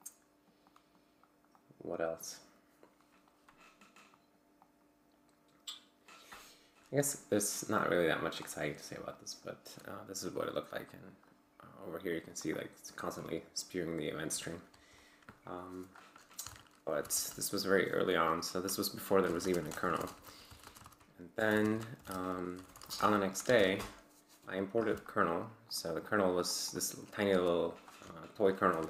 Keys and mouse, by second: 0.0-1.1 drag, 1.5 click, 4.1 click, 4.6 click, 7.1 click, 7.7-8.2 drag, 8.3 click, 9.1-9.5 drag, 10.8 click, 12.5 click, 13.0-14.1 drag, 15.5 click, 16.4 ctrl+c, 16.6-17.5 typing, 19.0-23.5 typing, 23.5 ctrl+l, 23.9 Return, 25.7 click, 26.5 click, 27.3 q, 28.7 ctrl+l.